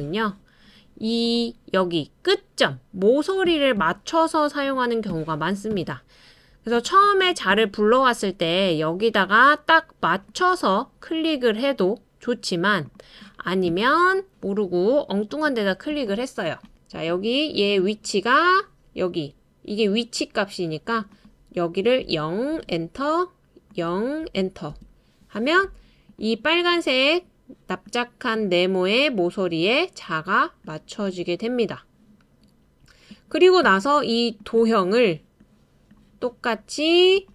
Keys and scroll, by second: 22.0-22.5 typing, 24.2-24.7 typing.